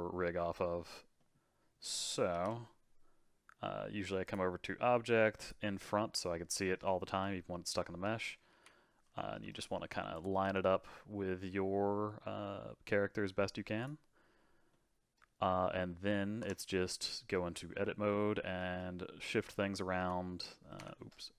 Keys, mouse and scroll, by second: 2.3 alt+g, 4.2 click, 5.4 click, 6.1-8.5 middle drag, 8.5 KP_1, 9.4 g, 10.4 s, 14.7-16.4 middle drag, 16.4 Tab, 17.1 middle click, 17.4 scroll down 1, 17.6-18.0 scroll up 5, 18.0-19.4 middle drag, 19.4 click, 20.0 g.